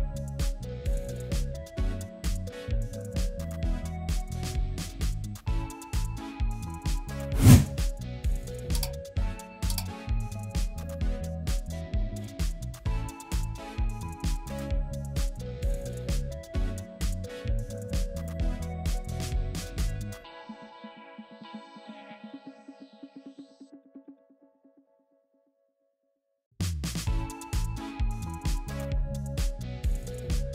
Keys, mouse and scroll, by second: 5.6-6.4 typing, 10.5 right click, 13.0-13.9 typing, 14.3 Return, 22.5 double click, 23.3 shift+click, 23.7 right click, 25.2 ctrl+g, 26.7 double click, 27.9-30.5 typing.